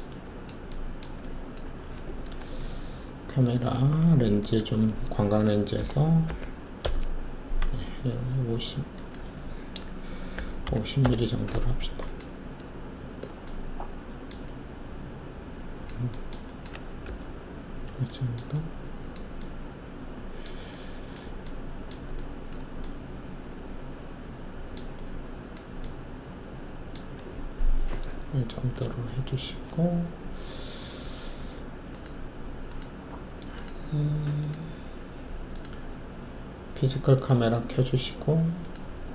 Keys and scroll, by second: 5.7 8, 6.2 5, 6.8 Return, 10.3-10.6 typing, 11.0 Return, 17.0 alt+5.